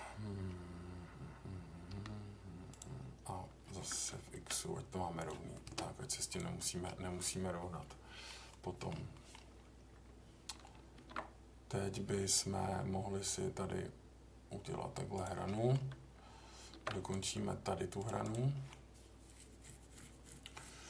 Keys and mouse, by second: 1.9 k, 6.6 middle click, 7.8-8.3 middle drag, 8.5 middle click, 9.1 middle click, 10.9 ctrl+r, 15.1 click, 15.5 middle click, 16.7 ctrl+r, 18.7-20.8 middle drag.